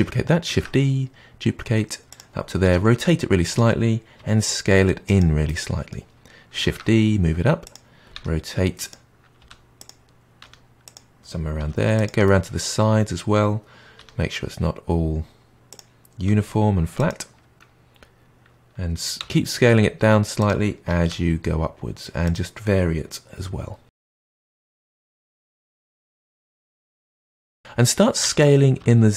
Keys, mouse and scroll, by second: 0.5 shift+d, 2.5 r, 4.1 s, 5.4-6.6 middle drag, 6.6 shift+d, 8.1 r, 9.3 g, 10.4 r, 11.5 g, 12.2-13.9 middle drag, 13.9 r, 16.2 g, 19.1 s, 21.1 g, 23.9-26.9 typing, 25.1-25.5 middle drag, 26.6-26.9 middle drag, 27.3-28.0 middle drag, 28.2 s.